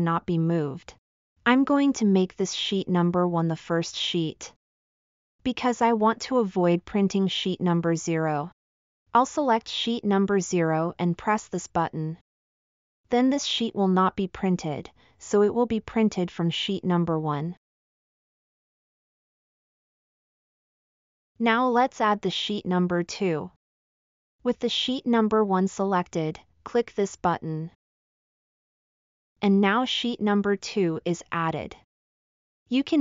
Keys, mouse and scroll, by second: 0.7-1.4 drag, 1.7 click, 2.7 click, 11.4 click.